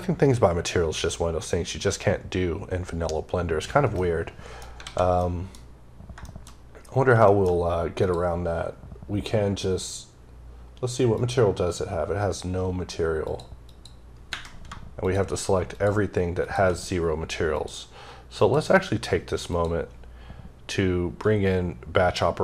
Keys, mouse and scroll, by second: 3.9 middle click, 4.1-4.6 scroll down 2, 5.0 middle click, 5.5 scroll up 1, 6.0 middle click, 6.3-6.9 scroll up 4, 7.1 middle click, 7.3 scroll up 2, 7.8 click, 11.0 click, 13.1 click, 13.5 click, 14.8 shift+click, 15.5 shift+double click, 16.3 shift+click, 17.3 click, 18.2 click, 19.3 click.